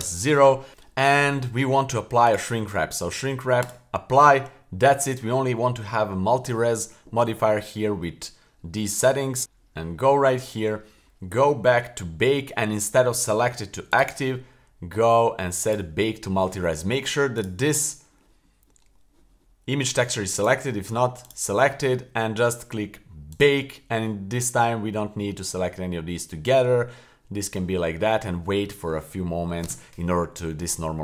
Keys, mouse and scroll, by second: 2.2-4.0 drag, 9.4 click, 9.4-10.0 scroll down 6, 10.8-12.3 scroll down 11, 13.9 click, 15.6 click, 17.4 click, 20.4-21.2 right drag, 21.2 click, 23.3 click.